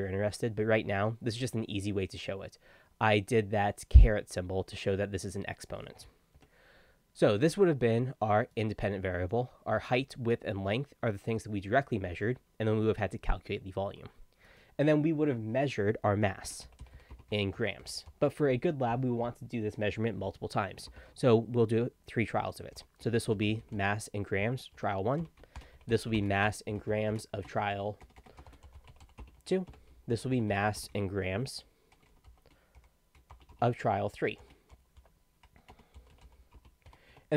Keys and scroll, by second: 6.4 Tab, 16.2-18.6 typing, 20.9 space, 22.8-36.9 typing, 25.2 Tab, 37.1 Tab.